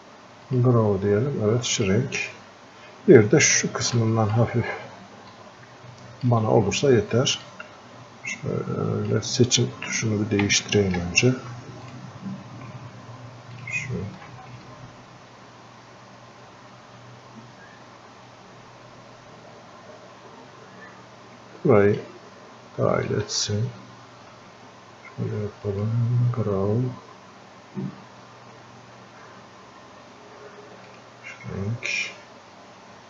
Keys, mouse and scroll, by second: 4.0 alt+click, 4.6-5.2 scroll up 1, 5.3-7.4 alt+drag, 7.8-9.3 ctrl+shift+drag, 10.4 ctrl+z, 11.9-24.7 ctrl+shift+drag, 15.0-22.2 ctrl+shift+drag, 25.7 click, 30.9 click.